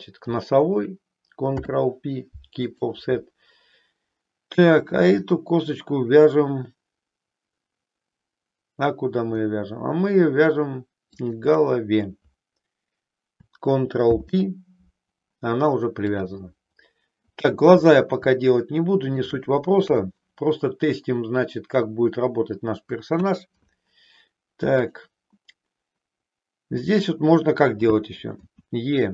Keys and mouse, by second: 1.4 ctrl+p, 4.8 click, 11.1 shift+click, 13.9 ctrl+p, 18.4 shift+middle click, 19.8 KP_3, 23.1 KP_1, 24.8 click, 28.4 e.